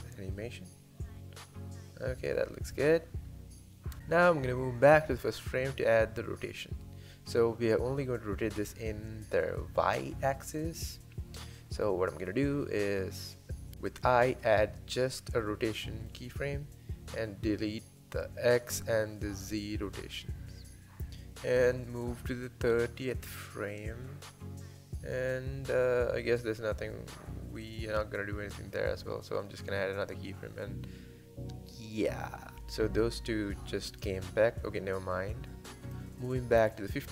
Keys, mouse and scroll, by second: 0.1 space, 2.8 space, 4.0 click, 5.0 r, 16.5-18.3 drag, 19.0 shift+click, 20.0 x, 20.9 click, 22.4-26.0 drag, 30.9-34.0 drag.